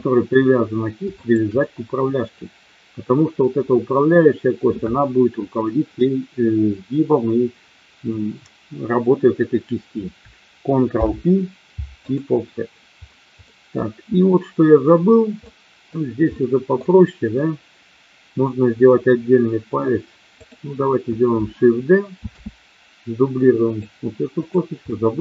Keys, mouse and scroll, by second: 0.1 middle click, 1.3 shift+click, 10.9 ctrl+p, 13.4 middle click, 15.4 middle click, 16.3 middle click, 22.2 shift+d, 23.7 click, 24.4 click, 24.8 middle click.